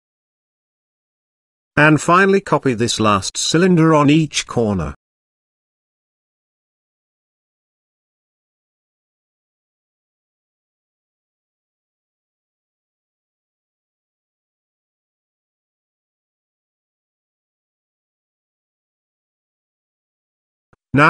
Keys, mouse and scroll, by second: 0.3 middle click, 0.8-1.3 middle drag, 1.9 shift+d, 6.8 shift+d, 12.2 shift+click, 13.3 ctrl+j, 14.3 shift+click, 15.8 ctrl+j, 16.4 shift+click, 17.3 ctrl+j, 17.9-18.3 middle drag, 19.3 click, 20.1 click, 20.5 shift+middle click.